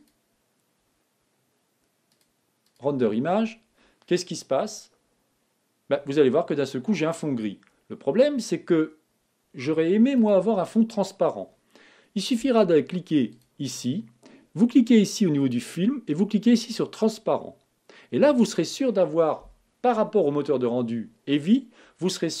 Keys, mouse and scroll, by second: 5.9 click, 17.9 click.